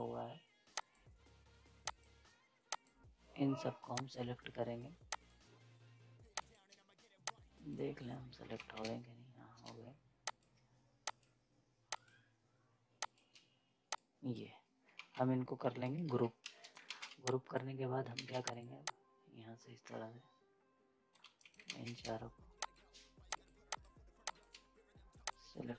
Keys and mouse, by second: 8.5 ctrl+z, 10.2 shift+click, 14.9 ctrl+z, 16.1 ctrl+g, 16.4 z, 16.5 right click, 16.9 ctrl+space, 17.0 z, 17.2 click, 18.1 ctrl+space, 18.5-21.2 drag, 21.2 z, 21.3 right click, 21.6 ctrl+space, 22.5-25.7 shift+drag.